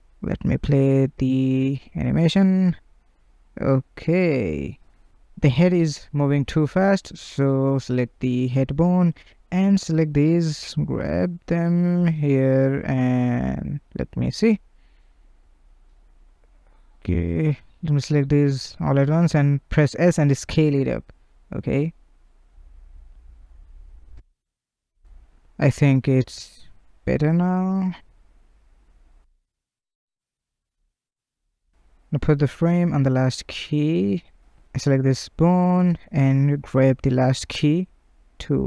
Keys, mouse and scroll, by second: 0.5 space, 4.0 space, 6.0 click, 6.8 click, 7.9 shift+click, 8.8 drag, 9.6 click, 10.2 g, 11.2 drag, 11.6 g, 12.6 click, 13.4 click, 13.6 space, 15.7 space, 16.1 click, 16.3 space, 16.7 space, 17.1-17.6 drag, 18.7 s, 20.8 click, 21.0 space, 23.8 space, 24.8 click, 25.0 space, 26.3 space, 27.1 click, 27.3 space, 27.9 space, 28.6-29.1 drag, 29.1 space, 32.2 space, 33.3-35.3 drag, 36.9 click.